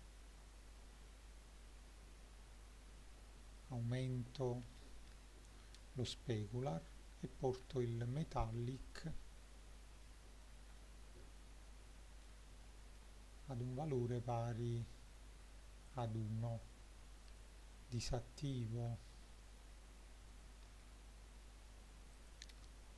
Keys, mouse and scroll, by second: 3.5-5.1 drag, 7.7-8.5 shift+middle drag, 8.8 click, 10.1-10.4 middle drag, 10.8-12.3 shift+middle drag, 12.6-13.0 middle drag, 15.9-18.5 drag, 18.9-20.7 shift+middle drag, 22.2 click.